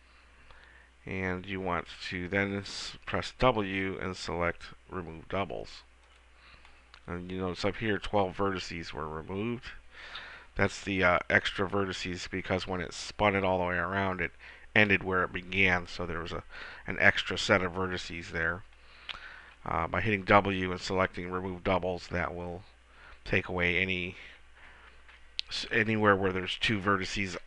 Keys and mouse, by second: 3.3 w, 20.1 w.